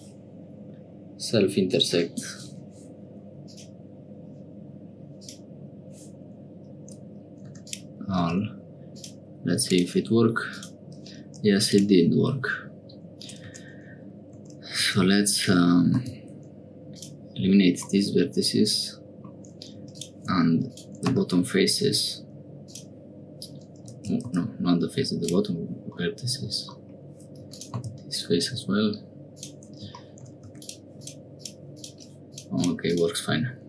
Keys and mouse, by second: 3.5-5.3 drag, 7.6 click, 8.2 x, 9.7 click, 10.5 click, 11.7 click, 13.5 Tab, 14.4 Tab, 14.8 2, 15.3 alt+click, 15.9 x, 17.9-19.3 middle drag, 19.8 3, 19.9 click, 20.8-23.9 drag, 21.0 x, 24.0 ctrl+z, 24.2 x, 26.0 middle click, 27.4 3, 27.5 click, 27.7 x, 30.4 3, 30.5 click, 30.9 click, 31.3 click, 31.7 click, 32.3 click, 32.5 click, 32.8 click.